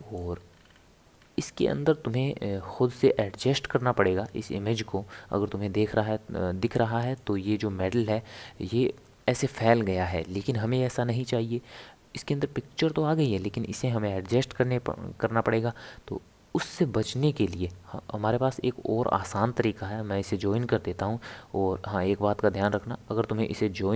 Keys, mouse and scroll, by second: 0.2-0.6 scroll up 2, 0.6 scroll down 3, 0.7-1.3 scroll up 2, 1.3 scroll down 1, 1.5 scroll up 1, 1.6-3.6 scroll down 1, 3.6-7.7 middle drag, 17.4-23.9 right drag.